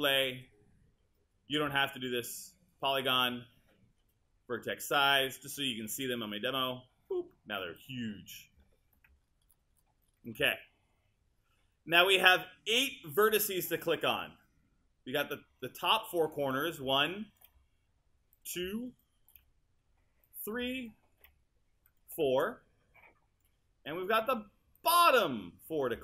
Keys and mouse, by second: 16.6 click, 18.5 click, 19.0 right click, 20.3 click.